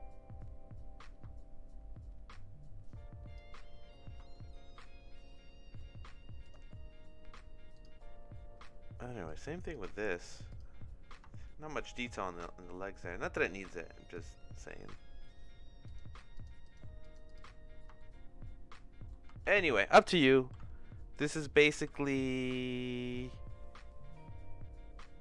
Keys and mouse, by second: 4.3 shift+middle click, 5.7 middle click, 6.4 click, 7.7 click, 9.2 click, 9.7 click, 10.1 click, 10.5 click, 11.3 shift+middle click, 12.8 middle click, 14.1 click, 14.6 middle click, 15.8 click, 16.3 click, 17.0 click, 18.0-19.1 shift+middle drag, 19.5 ctrl+z, 20.0-23.4 ctrl+middle drag, 20.5 ctrl+s, 21.7 ctrl+s.